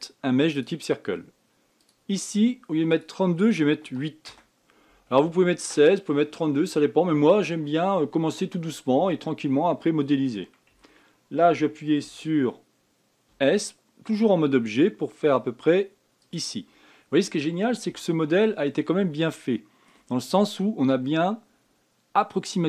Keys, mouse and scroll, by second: 2.2-6.5 drag, 11.1 Tab, 12.4 Tab, 13.7 s, 17.1 scroll up 4, 18.1-18.4 scroll up 1, 18.4-19.4 shift+middle drag, 19.4 scroll down 2, 19.8-22.6 shift+middle drag.